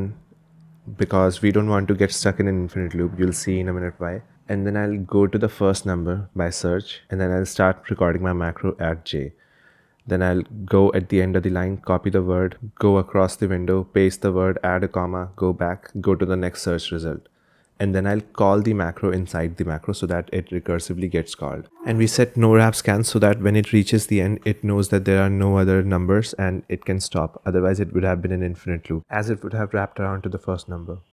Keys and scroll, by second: 0.0-1.2 typing, 1.8 ctrl+h, 3.2-4.7 typing, 5.5 Escape, 7.2-8.2 typing, 10.0-13.5 typing, 12.2 ctrl+l, 16.2 ctrl+h, 18.0 shift+2, 20.4 q, 22.2 shift+2, 22.7 j, 24.1 ctrl+l, 25.1-31.1 typing.